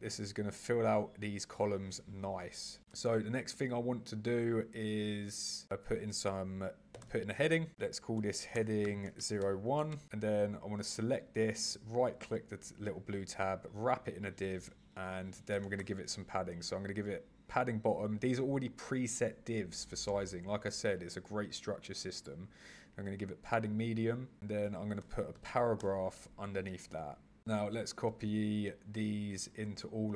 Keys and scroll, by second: 2.8 super+e, 25.0 super+e, 27.6 super+c, 28.2 super+v, 29.6 super+c.